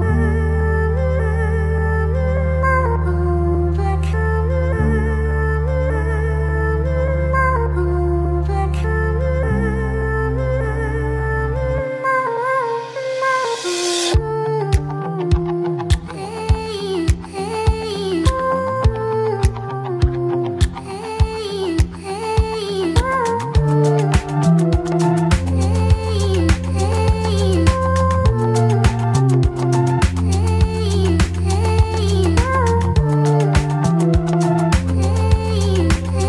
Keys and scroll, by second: 0.6 F3, 1.3 F4, 1.6-2.9 typing, 4.0 ctrl+z, 4.2 e, 4.4 ctrl+z, 5.1 a, 8.8 w, 8.9 F3, 9.3 1, 10.3 Delete, 11.0 Delete, 11.9 Delete, 12.8 5, 13.1 r, 13.8 ctrl+z, 15.5 ctrl+z, 17.5 ctrl+z, 18.6 F3, 19.0 w, 19.2 F4, 20.4 F4, 20.9 z, 22.1 F4, 22.9 F4, 23.2 g, 23.6 F4, 23.8 ctrl+s, 25.9-27.8 typing, 26.0 Return, 28.4 alt+F4, 31.7 alt+z, 32.0 F4, 32.1 F3, 32.9 1, 33.5 2, 34.1 e.